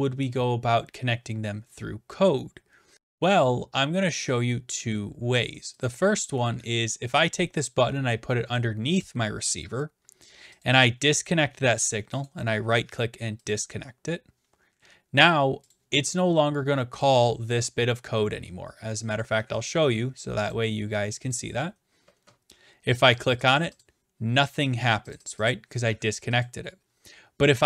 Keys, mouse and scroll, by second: 5.9 click, 8.5 click, 10.8-11.7 drag, 12.3-13.3 right drag, 13.5 click, 15.7 click, 17.0 click, 17.8-18.7 scroll up 2, 18.7 scroll up 1, 19.2 click, 20.5 click, 21.3 click, 23.1 click, 23.4 click, 23.5 click, 23.6 click, 23.8 click, 25.1 click, 25.3 click, 25.5 click, 26.4 click.